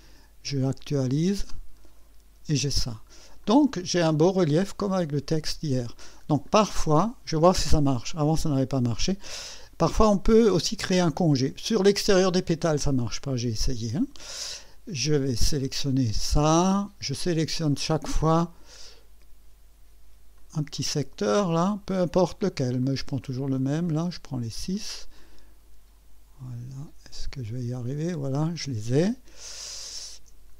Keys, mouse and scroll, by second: 0.6 click, 2.9 click, 3.4-5.3 drag, 5.8 scroll up 2, 6.3 scroll down 2, 6.5 scroll up 2, 7.0-8.5 drag, 15.7 click, 17.7 ctrl+click, 18.3 ctrl+click, 20.4 ctrl+click, 20.8 ctrl+click, 22.8 ctrl+click, 24.7 ctrl+click, 25.2-25.8 ctrl+drag, 27.8 ctrl+click, 28.5-30.3 ctrl+drag.